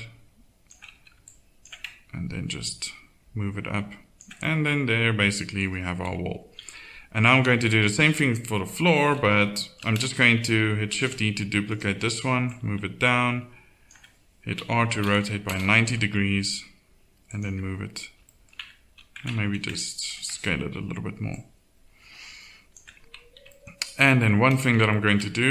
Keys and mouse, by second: 0.9 a, 6.0 KP_1, 6.6 Tab, 9.2 shift+c, 10.9 shift+d, 14.6 r, 15.8 g, 18.6 Tab, 19.8 a, 23.0 middle click, 23.4 Tab.